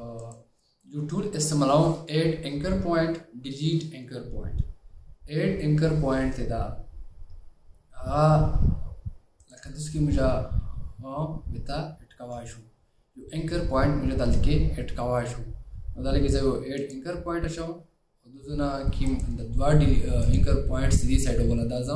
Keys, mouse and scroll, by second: 1.0 right click, 19.2 right click.